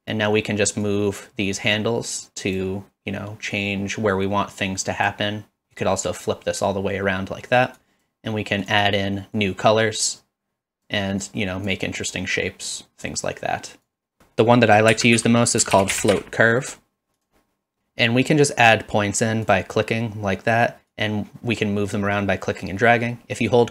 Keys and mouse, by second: 0.9-2.6 drag, 3.5-5.1 drag, 5.7-6.3 drag, 7.8 drag, 8.7 click, 9.4-10.9 drag, 11.3-11.7 drag, 12.8-13.8 drag, 14.2 shift+a, 14.2 BackSpace, 19.4 click, 20.9-23.7 drag.